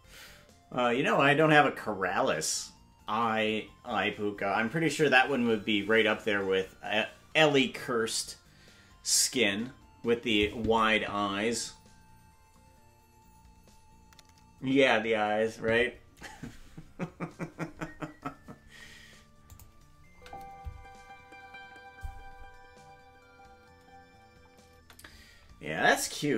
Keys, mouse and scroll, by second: 19.5 click, 20.1 space.